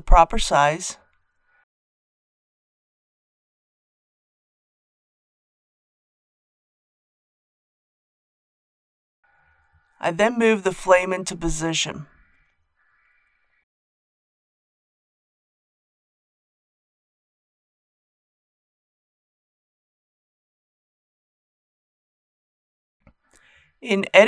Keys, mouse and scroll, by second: 1.2 r, 1.7 z, 2.1 KP_9, 2.4 KP_0, 6.6 s, 9.6 click, 9.9-10.5 scroll up 1, 10.6 g, 10.6 z, 12.0 click, 12.5 KP_7, 13.2-13.7 scroll up 1, 13.8 shift+middle click, 14.9-16.6 middle drag, 16.8 KP_1, 17.8 g, 18.9 shift+click, 19.2 shift+middle click, 21.7 KP_7, 23.5 Tab.